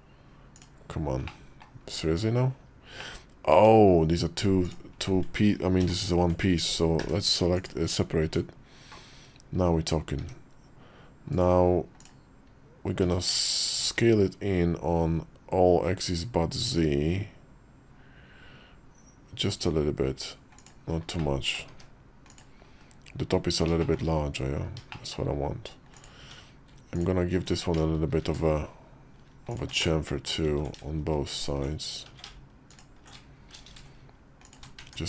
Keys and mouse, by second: 0.4 click, 1.1 middle click, 1.8 KP_5, 2.8 middle click, 3.4 Tab, 5.6 ctrl+l, 6.9 p, 8.1 Tab, 10.0 s, 11.8 click, 12.9 s, 21.0 middle click, 22.6 KP_5, 23.6 shift+middle click, 23.7 shift+click, 24.8 click, 25.8 click, 26.0 Tab, 28.1 ctrl+b, 29.6 middle click, 30.4 ctrl+z, 31.2 alt+shift+click, 32.0 ctrl+z, 32.5 alt+shift+click, 33.4 ctrl+b, 34.6 Tab.